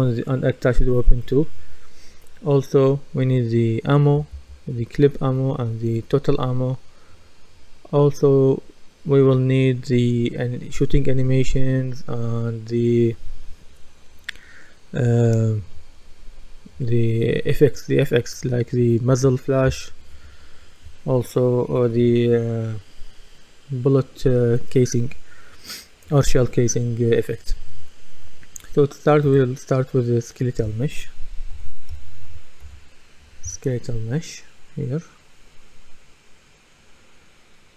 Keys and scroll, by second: 31.3-32.8 typing.